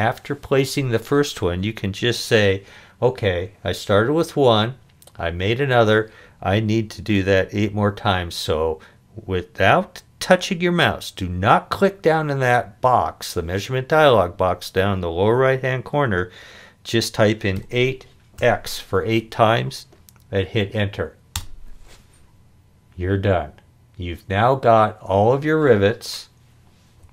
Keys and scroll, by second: 17.6 8, 18.4 x, 21.4 Return, 27.0 o.